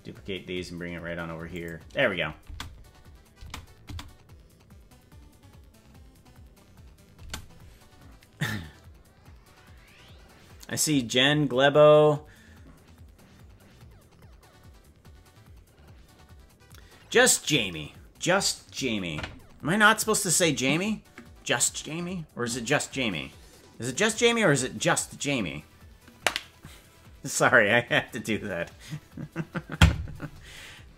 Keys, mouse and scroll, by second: 2.6 space, 3.4 space, 4.0 space, 7.2 space.